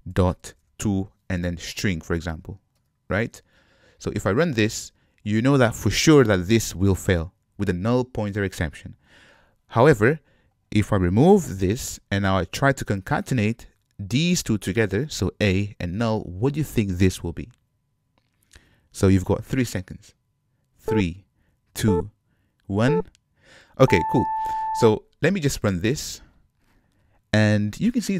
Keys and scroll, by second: 5.3 shift+F10, 12.0 super+y, 26.1 shift+F10.